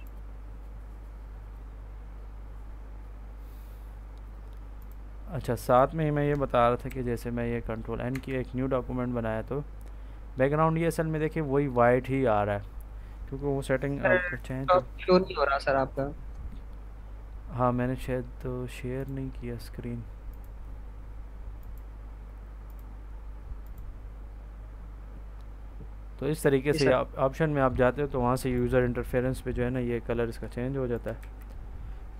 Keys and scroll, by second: 6.8 ctrl+n, 8.0 Return, 31.1 ctrl+s.